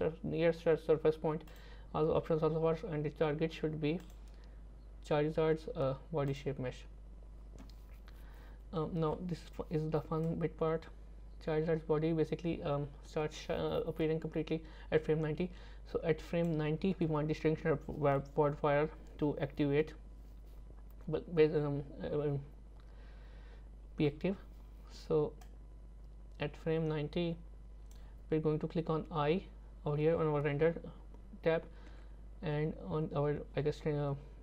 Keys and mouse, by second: 4.0 click, 10.3-16.5 drag, 25.5-28.0 drag, 31.9 i.